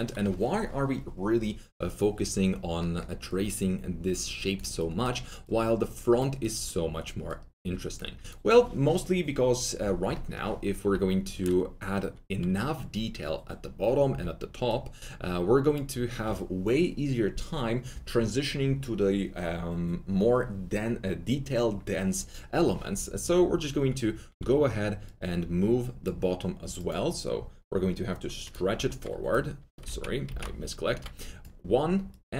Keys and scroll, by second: 11.7 4, 14.0 2, 29.8 ctrl+z.